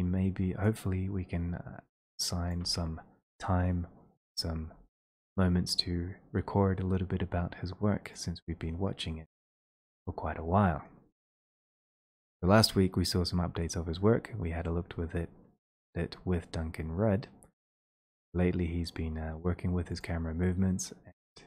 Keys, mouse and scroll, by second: 0.6 click, 1.4-1.9 scroll, 2.6 click, 8.2 click, 10.0 click, 15.7 click, 16.0 click, 20.1 click.